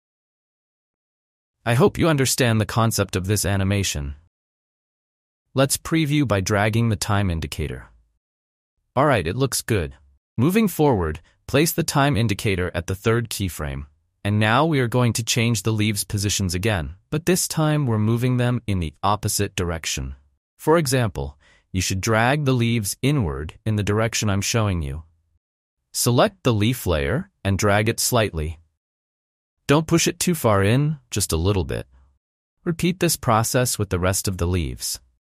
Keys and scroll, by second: 2.6 F1, 4.2 F1, 17.3 F1.